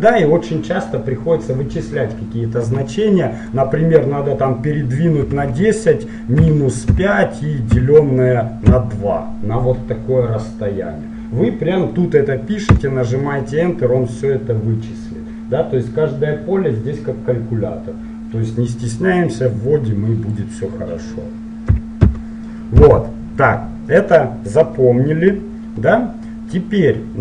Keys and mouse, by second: 3.6-5.3 drag, 20.5-22.2 drag, 22.2-23.7 middle drag.